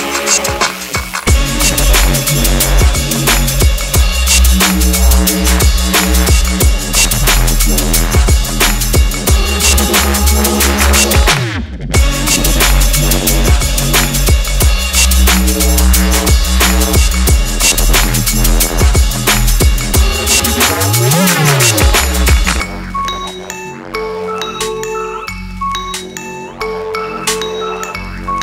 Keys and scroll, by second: 6.7 ctrl+0.